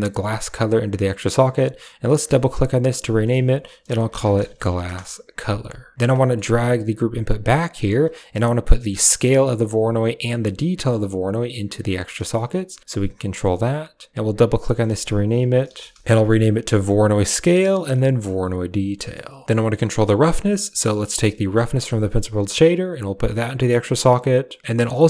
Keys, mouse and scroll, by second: 2.3-4.9 drag, 4.5 s, 5.9 middle click, 6.2 click, 6.4 click, 6.7 g, 7.6 click, 8.0 middle drag, 9.3-10.0 drag, 10.9-11.8 drag, 12.0 click, 12.1 typing, 13.0 click, 14.1-16.0 drag, 16.7 click, 16.9 click, 19.8 click, 20.3 g, 20.9 click, 21.1 middle click, 22.3-23.3 drag.